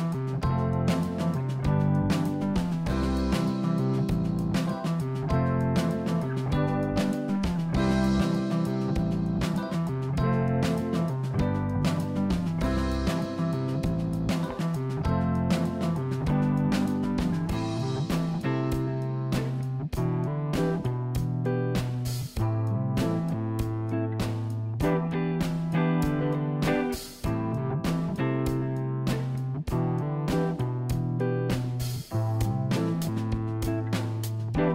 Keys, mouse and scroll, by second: 0.8 click, 1.5-3.5 drag, 4.1 click, 4.8-5.4 scroll up 2, 5.4 click, 6.1 Tab, 8.5 ctrl+r, 11.3 ctrl+r, 13.0 click, 14.0-15.4 middle drag, 15.4-16.6 scroll up 3, 16.6 ctrl+r, 18.9 ctrl+r, 21.0 click, 21.6-22.8 scroll down 2, 22.8 Tab, 23.1 click, 23.8-25.5 middle drag, 25.9 scroll up 2, 26.2 middle click, 26.8 click, 27.4 Tab, 28.3 ctrl+r.